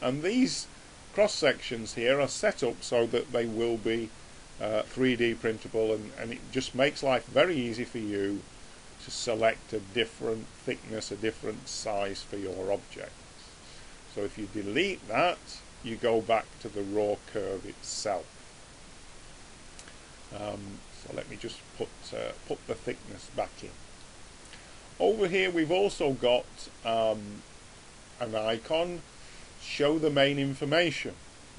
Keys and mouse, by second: 0.4 click, 7.8 click, 9.4-11.2 middle drag, 14.9 click, 20.4 click, 23.3-30.2 middle drag, 30.2 click.